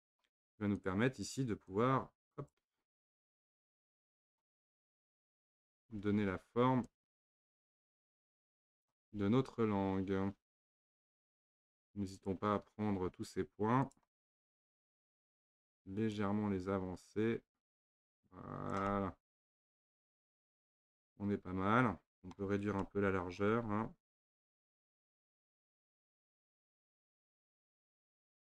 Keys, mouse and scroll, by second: 0.8 click, 1.7 click, 3.1 click, 3.7 click, 4.9 click, 5.7 shift+click, 6.9 click, 9.0-12.2 middle drag, 12.2 click, 13.9 shift+click, 14.6 shift+click, 15.2 shift+click, 16.1 click, 18.9-24.3 middle drag, 24.3 click, 24.8 shift+click, 25.6 click, 27.8 click.